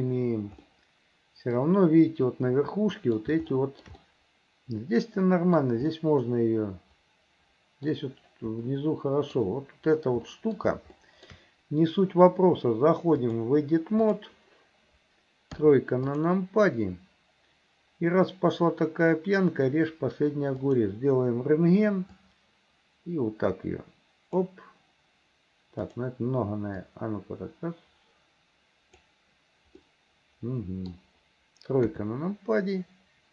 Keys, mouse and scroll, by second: 0.0 s, 0.7 middle click, 2.6 middle click, 3.6 shift+middle click, 4.0-5.6 middle drag, 5.9-8.0 middle drag, 8.7 middle click, 10.3 middle click, 11.0 shift+middle click, 13.2-14.3 drag, 15.6 KP_3, 16.1 click, 20.7 click, 22.2-24.5 drag, 25.9 click, 26.9-29.1 drag, 29.9-31.0 middle drag, 31.9 KP_3.